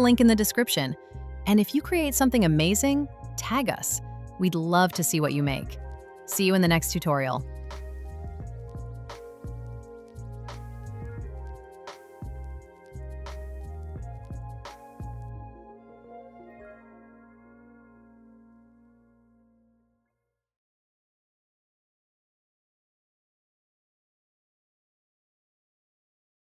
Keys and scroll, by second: 0.0 shift+super+v, 1.2 shift+Return.